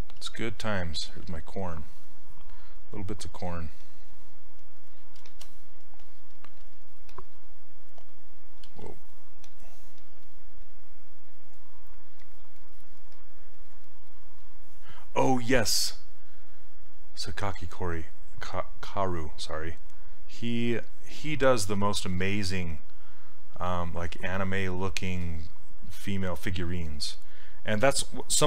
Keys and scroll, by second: 0.2 s.